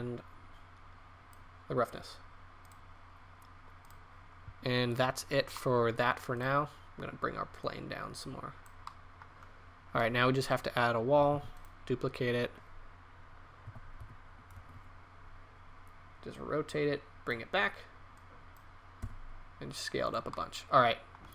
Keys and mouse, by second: 6.3-6.6 right drag, 8.8-10.1 middle drag, 10.5 right click, 11.3 shift+d, 13.6 r, 19.0 s.